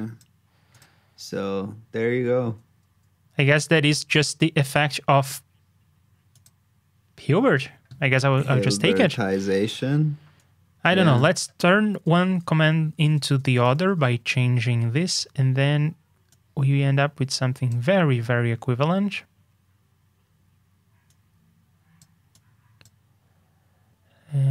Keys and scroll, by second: 11.8 super+d.